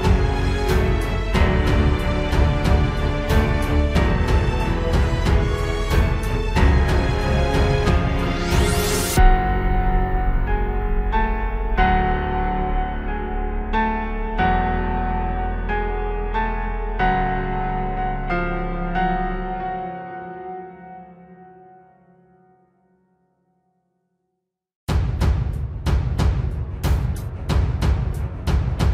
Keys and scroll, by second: 0.2 ctrl+space, 1.1 ctrl+t, 1.2 ctrl+space, 2.1 ctrl+z, 3.0 ctrl+space, 5.4 ctrl+space, 6.5 ctrl+z, 6.9 ctrl+z, 7.3 ctrl+space, 8.1 ctrl+space, 9.7 ctrl+space, 10.2 ctrl+space, 11.0 ctrl+space, 11.7 ctrl+space, 14.7 ctrl+space, 15.7 ctrl+t, 16.6 ctrl+space, 19.8 ctrl+shift+j, 19.9 ctrl+t, 21.1 ctrl+space, 21.4 ctrl+space, 22.0 ctrl+g, 22.2 ctrl+space, 24.8 ctrl+j, 25.0 ctrl+space, 25.3 ctrl+t, 25.6 ctrl+z, 26.3 ctrl+space, 26.8 ctrl+alt+z, 27.2 ctrl+d, 27.9 ctrl+e.